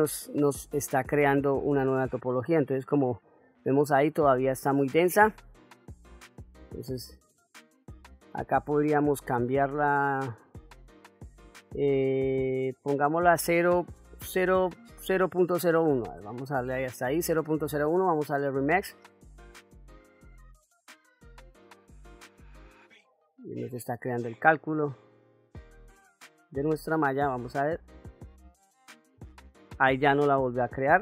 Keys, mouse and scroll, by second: 1.8-2.5 ctrl+middle drag, 2.8-3.8 middle drag, 7.0-17.1 drag, 18.1-19.3 drag, 24.6 middle click, 25.9 click, 26.6 click, 27.8 click, 30.1-31.0 middle drag.